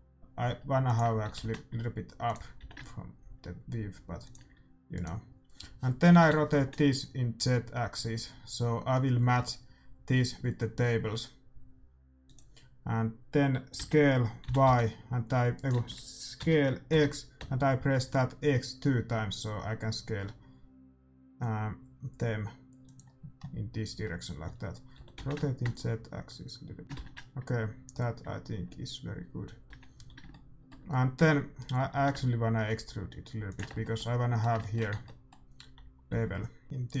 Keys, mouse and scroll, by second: 1.4 r, 2.6 g, 5.0-6.7 right drag, 6.2 r, 13.8 s, 16.4 s, 23.5 middle click, 25.0 r, 26.8 ctrl+s, 26.8-28.6 drag, 26.8 a, 28.6 shift+z, 30.0-31.2 drag, 30.2 shift+z, 30.4 middle click, 31.2 Tab, 32.0 e, 33.8 Tab, 35.0 Tab, 35.7 a, 35.9 a, 36.1 a, 36.6-37.0 drag.